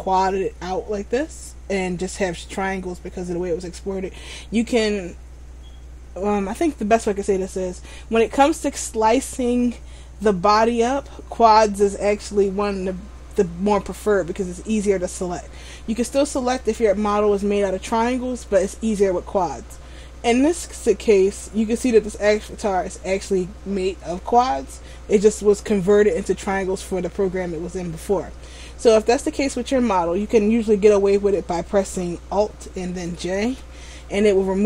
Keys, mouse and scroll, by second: 33.6 alt+j.